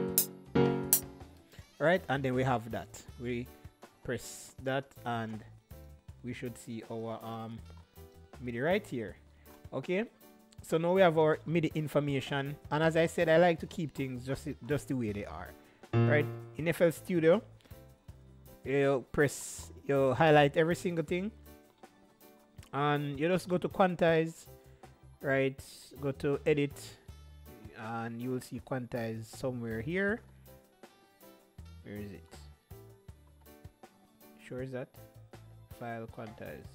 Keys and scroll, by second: 0.0-1.1 typing.